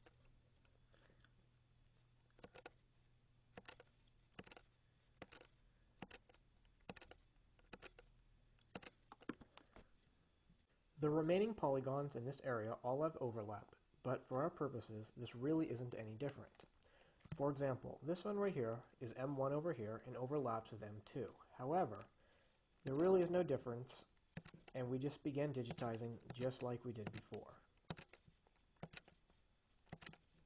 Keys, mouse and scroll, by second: 2.7 click, 3.8 click, 5.5 click, 6.2 click, 7.1 click, 8.0 click, 8.8 click, 9.5 Escape, 10.4-12.0 drag, 23.2 click, 24.6 click, 26.0 click, 26.6 click, 27.4 click, 28.2 click, 29.1 click, 30.2 click.